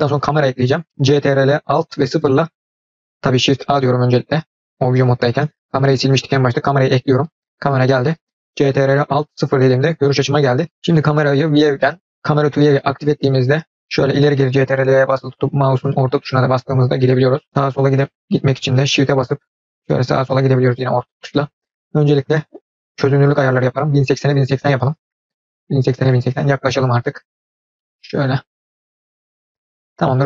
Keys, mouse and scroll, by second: 2.2 ctrl+alt+KP_0, 4.2 shift+a, 9.3 ctrl+alt+KP_0, 10.7 KP_0, 11.4 click, 12.3-13.2 drag, 13.2-18.2 middle drag, 19.0-20.2 shift+middle drag, 21.9 click, 23.0 click, 23.7-25.2 drag, 26.3-26.9 scroll up 2, 27.6 scroll up 1, 27.8-28.4 shift+middle drag, 28.9-29.2 scroll up 1, 29.2-29.8 scroll down 1.